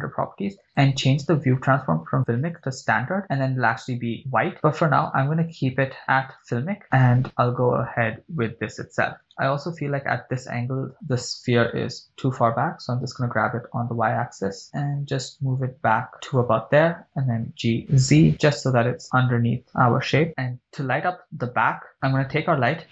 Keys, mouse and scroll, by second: 0.1 scroll down 2, 0.7-3.3 drag, 5.7-7.2 drag, 9.3 right click, 13.1 g, 14.1 y, 16.8 click, 17.9 g, 18.0 z, 20.3 shift+click, 21.9 click.